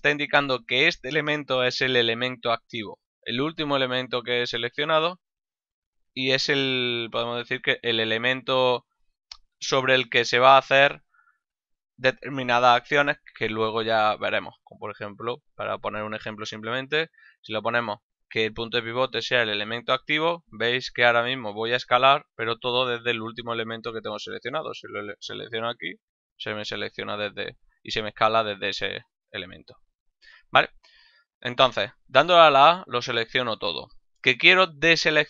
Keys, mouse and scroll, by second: 10.4 s, 12.3 right click, 15.9 click, 19.3 click, 21.0 s, 22.7 right click, 24.0 right click, 25.6 s, 26.9 right click, 28.8 click, 30.0 click.